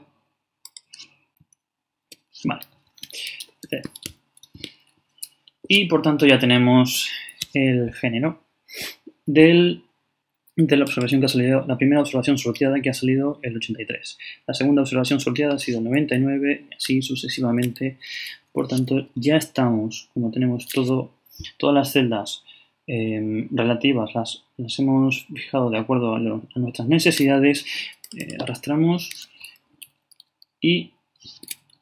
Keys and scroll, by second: 2.9 shift+,, 3.6 shift+0, 29.7 shift+Right.